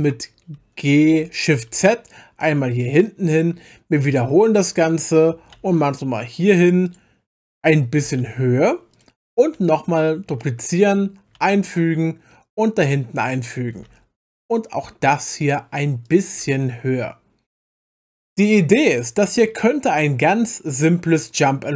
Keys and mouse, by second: 1.1 g, 1.5 shift+z, 3.0 click, 4.1 shift+d, 5.6 shift+z, 6.9 click, 8.0 g, 8.2 z, 8.9 click, 10.3 shift+d, 11.4 shift+z, 13.2 click, 13.8 g, 14.3 z, 15.4 click, 16.0 click, 16.4 g, 16.6 z, 17.8 click, 18.3-19.4 middle drag.